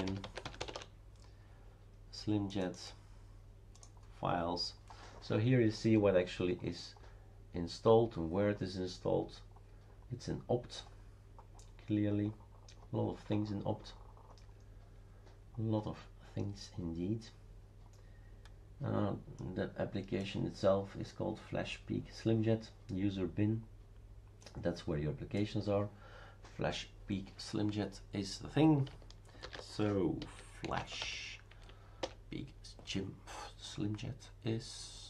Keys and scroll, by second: 0.0-1.1 typing, 29.5 shift+super+d, 30.0-31.5 typing, 32.0 Return.